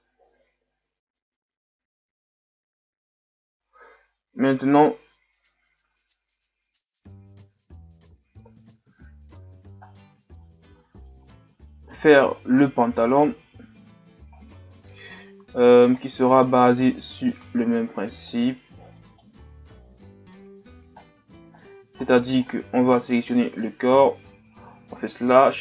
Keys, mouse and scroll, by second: 11.2-12.3 shift+scroll down 5, 12.3 shift+scroll up 4, 13.4-13.9 scroll up 3, 14.3-15.2 shift+scroll down 2, 15.9-16.5 shift+scroll up 8, 16.6-17.3 ctrl+scroll up 5, 17.3 right click, 17.5 Tab, 18.3-21.0 drag, 21.0-22.7 scroll down 14, 21.3 Tab, 22.7-23.2 scroll up 7, 23.3 right click.